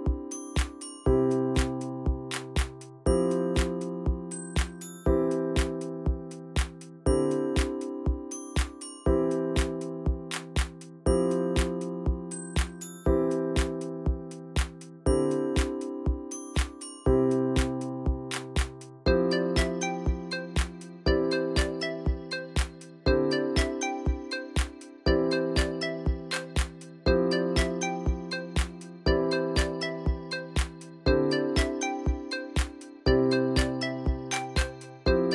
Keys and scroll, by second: 0.6-1.7 typing, 20.7 ctrl+c, 21.0 ctrl+c, 21.0 ctrl+v, 25.0-27.2 typing.